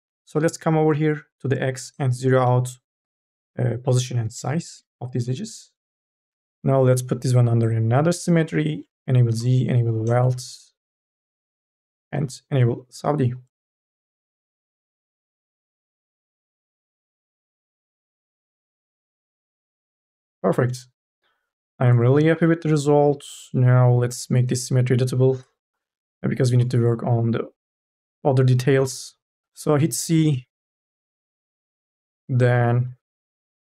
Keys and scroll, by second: 2.8 KP_0, 4.6 Return, 14.0 n, 22.5 ctrl+z, 29.4 c, 31.2 Delete, 33.2 q.